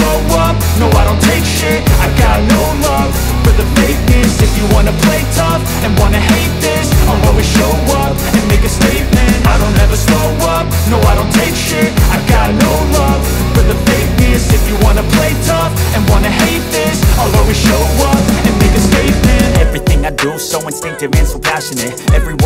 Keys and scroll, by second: 0.5 shift+F2, 1.0 Escape, 3.8 c, 4.8 shift+Page_Up, 6.4 shift+Page_Down, 7.2 Escape, 9.4 c, 9.7 Escape, 10.0 F3, 13.5 c, 13.8 shift+F2, 14.4 Escape, 15.6 c, 15.8 Escape, 19.0 c, 19.2 Escape, 20.3 ctrl+i.